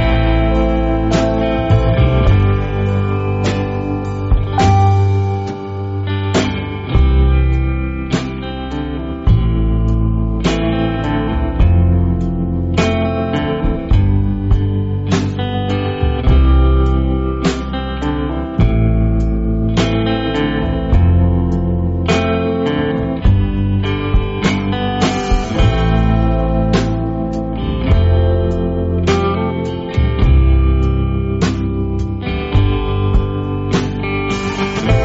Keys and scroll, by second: 9.7-11.2 typing, 17.3 space, 20.1 shift+super+F5, 20.9-21.6 typing, 23.6-24.2 typing, 27.4 space, 27.9 space, 28.4 space, 29.7 p, 34.0 v.